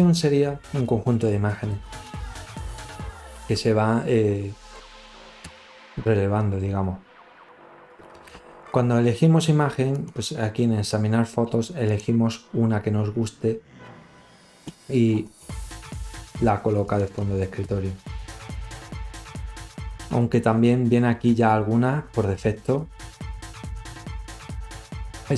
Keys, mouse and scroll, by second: 7.3 click, 9.3 click, 13.3 click, 14.2 click, 14.4 click, 20.4 click, 21.1 click.